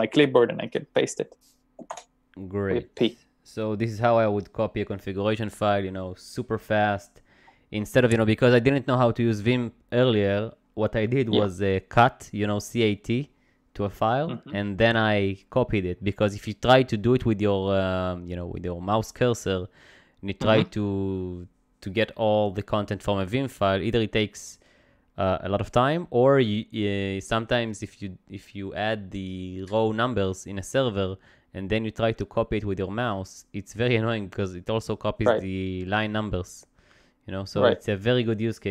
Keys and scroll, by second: 2.0 shift+p.